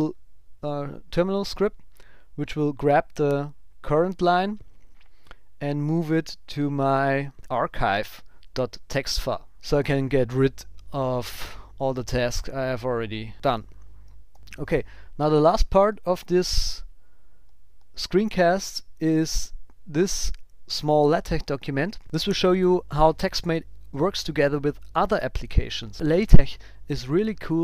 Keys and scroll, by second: 9.5 super+s, 14.3 super+w.